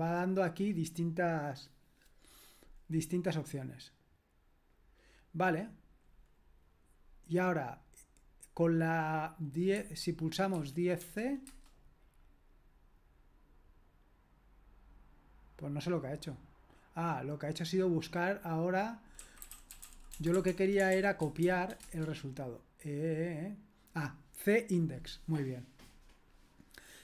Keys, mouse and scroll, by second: 10.3-11.5 typing, 18.9-21.9 typing.